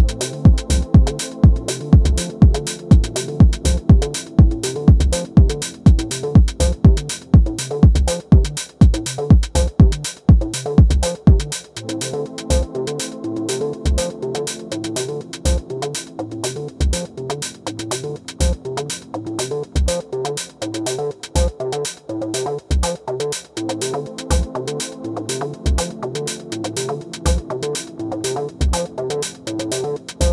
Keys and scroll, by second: 1.6 super+z, 18.1 space, 18.7 space, 25.6 super+z, 28.7 space.